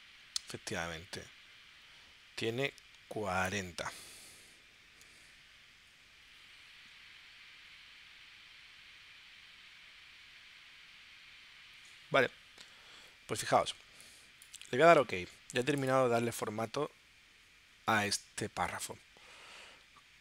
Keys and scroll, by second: 4.3 4, 4.6 0, 5.1 Tab.